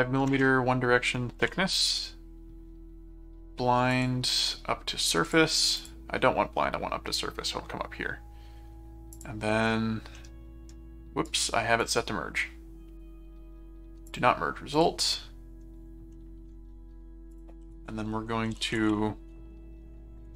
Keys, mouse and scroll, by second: 3.9 click, 5.2 click, 9.1 click, 10.1 middle click, 11.2 right click, 11.8 click, 14.1 click, 14.7 click, 16.1 middle click, 17.3 click, 17.6-19.3 typing, 20.3 ctrl+a.